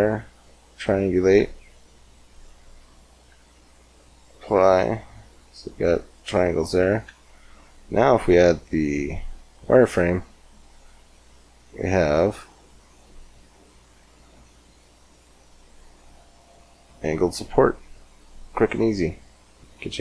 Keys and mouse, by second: 1.2 Tab, 2.4 Tab, 3.1 Tab, 4.0-5.6 drag, 4.4 Tab, 6.9 Tab, 11.1-12.4 middle drag, 15.1-18.8 middle drag, 18.8-20.0 drag.